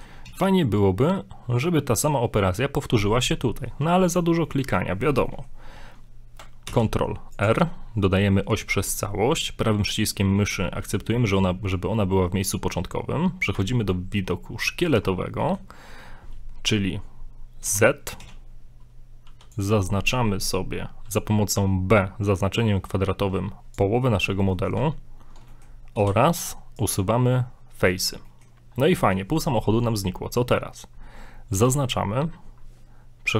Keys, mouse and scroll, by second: 0.2 a, 0.4 scroll up 3, 0.6 middle click, 4.5 middle click, 5.3 middle click, 6.7 ctrl+r, 12.6-13.1 scroll down 3, 14.5-14.8 scroll up 2, 14.7 shift+middle click, 15.1 scroll down 2, 15.4 shift+middle click, 16.0 scroll up 1, 17.7 z, 18.2 a, 19.3 b, 24.5 middle click, 25.5 middle click, 26.0 middle click, 26.0 x, 27.3 middle click, 27.9 z, 28.3 shift+middle click, 28.5 shift+middle click, 28.6 scroll up 2, 28.8 middle click, 30.1-30.4 scroll down 2, 30.4 middle click, 31.5 a.